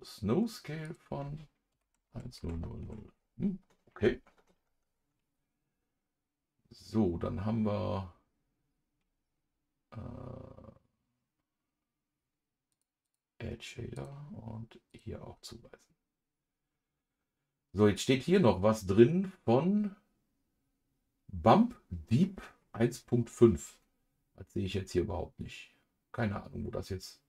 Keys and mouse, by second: 0.8-12.7 drag, 13.0 click, 13.9-15.0 drag.